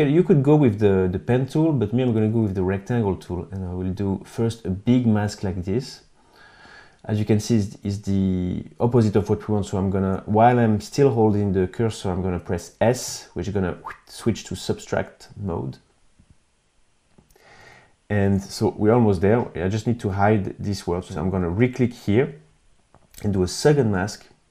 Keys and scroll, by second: 12.4 s.